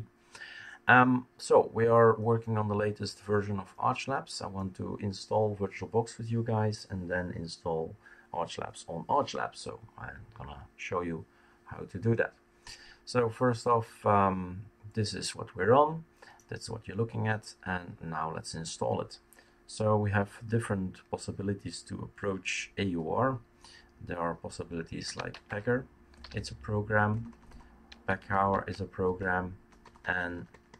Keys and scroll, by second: 24.8-30.7 typing, 28.5 Tab.